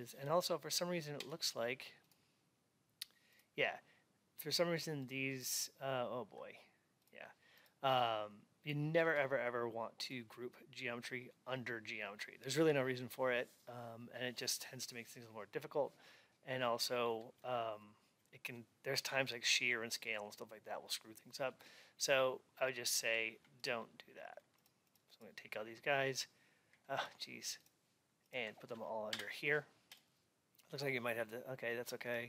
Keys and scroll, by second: 0.2 Up.